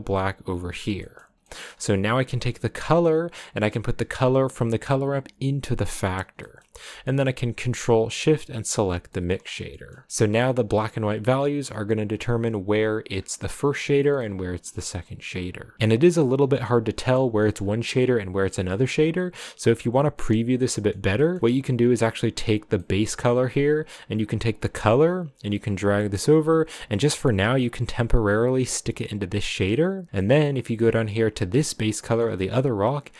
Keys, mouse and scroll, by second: 0.8 scroll down 3, 1.0-6.0 middle drag, 8.5 ctrl+shift+click, 9.0 middle click, 9.3 scroll up 3, 9.7 shift+middle click, 9.9 scroll up 1, 10.1 middle click, 10.5 click, 13.3-14.5 middle drag, 14.5-15.7 scroll up 4, 15.7-17.7 middle drag, 17.7 scroll down 5, 18.3 middle click, 18.9-20.1 scroll down 1, 20.1-20.6 scroll down 1, 20.6 middle click, 21.5-22.0 scroll up 1, 22.0 click, 25.7-29.1 drag, 29.8-31.3 middle drag, 31.3 scroll up 5, 31.5 click, 31.8 scroll down 2, 32.4-33.1 middle drag.